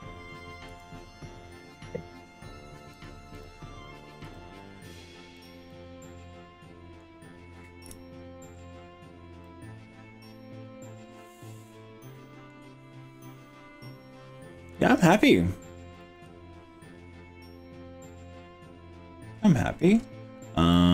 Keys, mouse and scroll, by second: 0.7 g, 3.1 click, 3.5 click, 4.3 g, 5.5 click, 5.7-7.1 middle drag, 7.9 KP_1, 8.5-9.4 scroll down 3, 9.4-12.5 middle drag, 12.7-13.1 scroll down 2, 13.3-14.5 middle drag, 14.7-20.0 middle drag, 20.3-20.7 scroll up 3, 20.7 middle click.